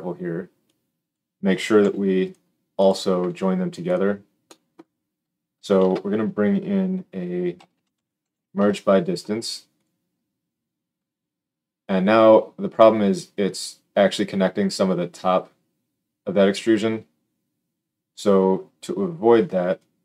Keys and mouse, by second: 1.7 g, 2.2-2.7 middle drag, 2.7 click, 3.1-19.7 middle drag, 3.1 g, 5.7 shift+a, 19.7-20.0 drag.